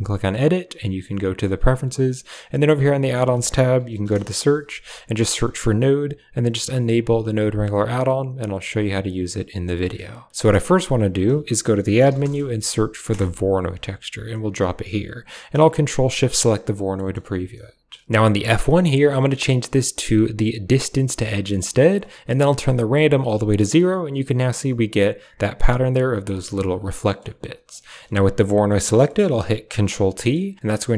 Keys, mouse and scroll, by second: 9.6 middle click, 10.2 click, 10.6 shift+a, 15.3-16.4 typing, 15.9 ctrl+shift+click, 18.2-20.6 drag, 22.7 click, 26.9 middle click, 27.7 click, 27.9 typing, 28.9 middle click, 29.6 ctrl+t, 30.0 middle click, 30.6 a.